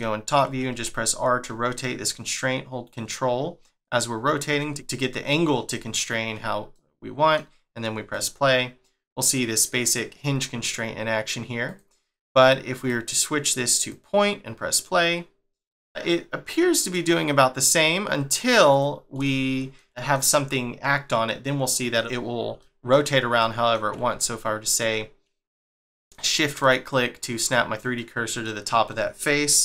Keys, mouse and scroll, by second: 0.0 shift+middle click, 0.7 r, 6.7 middle click, 8.1 click, 11.6 click, 12.0 click, 12.7 click, 14.7 click, 15.7 middle click, 16.4 middle click, 18.3 click, 18.7 click, 19.2 shift+middle click, 21.2 middle click, 22.6 shift+middle click, 25.8 shift+right click, 26.6 middle click, 27.9 middle click.